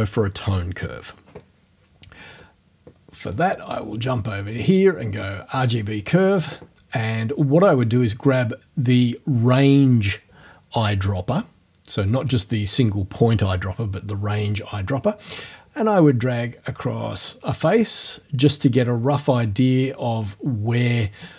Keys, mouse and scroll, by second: 2.3 click, 3.3 click, 4.4 click, 5.6 click, 14.4 click, 16.5-18.2 drag.